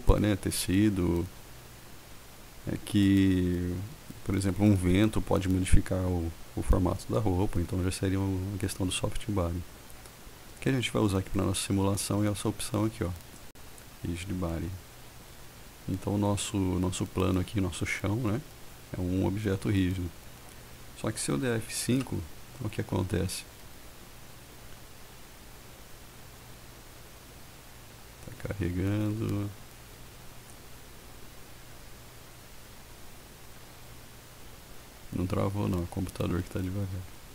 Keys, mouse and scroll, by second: 13.7 click, 22.4 F5.